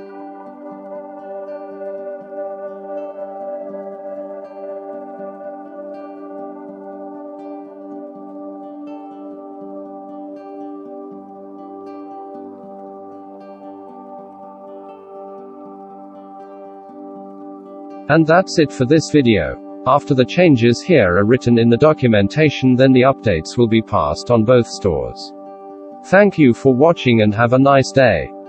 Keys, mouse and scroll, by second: 0.7 shift+q, 5.8-6.9 middle drag, 7.3 shift+middle click, 8.3-10.7 middle drag, 11.2 F9, 18.6 ctrl+z, 19.8-20.2 shift+middle drag, 20.6-22.0 middle drag, 22.3-24.1 shift+middle drag, 28.4 ctrl+].